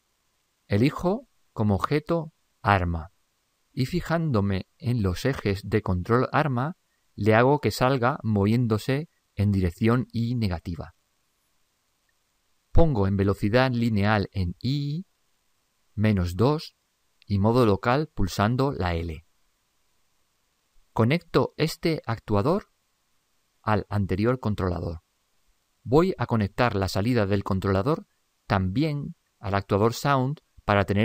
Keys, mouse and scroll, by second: 4.7 ctrl+Up, 5.9-8.2 middle drag.